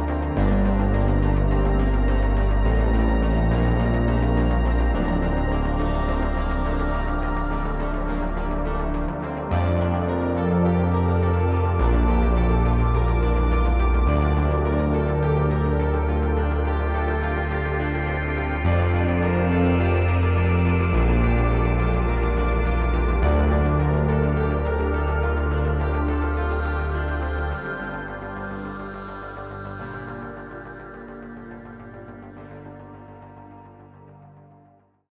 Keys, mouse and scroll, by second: 0.7 click, 12.2 ctrl+shift+click, 18.8 ctrl+shift+click, 31.7-35.1 drag.